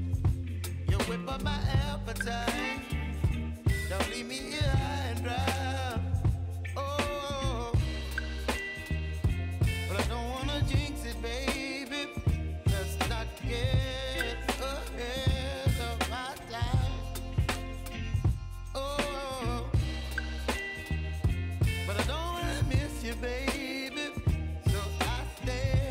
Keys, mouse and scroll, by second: 2.8 F9, 3.7-7.7 drag, 7.7 space, 8.9 click, 10.2 space, 12.0 click, 12.7-13.3 alt+scroll up 1, 13.5 space, 13.7-20.1 drag, 20.1 r, 22.2-25.0 drag, 25.6 space.